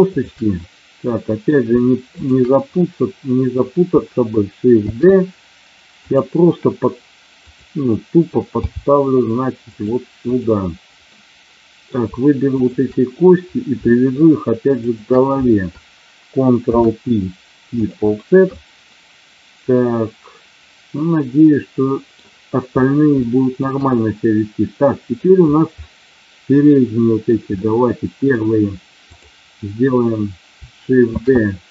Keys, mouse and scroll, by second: 0.1 shift+click, 0.6 middle click, 2.1 shift+click, 2.7 middle click, 4.8 shift+d, 6.0 click, 7.3 click, 8.5 g, 9.7 click, 10.2 click, 11.1 middle click, 12.6 shift+click, 13.7 shift+middle click, 14.8 shift+click, 16.6 ctrl+p, 18.4-20.5 middle drag, 20.6-22.1 middle drag, 23.1 shift+middle click, 23.8-25.2 middle drag, 25.8-27.2 middle drag, 27.6 middle click, 28.9 click, 31.1 shift+d.